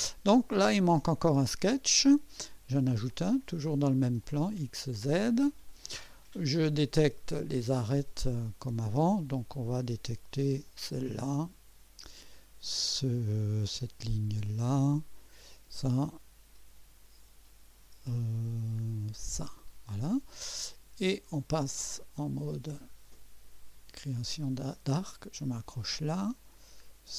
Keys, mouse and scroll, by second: 3.1 click, 4.2 click, 5.2 click, 7.4 click, 8.4 scroll up 1, 10.6 click, 14.3 click, 15.5 click, 19.2 click, 21.7 click, 22.5-22.8 scroll down 2, 23.1 right click, 25.3 click.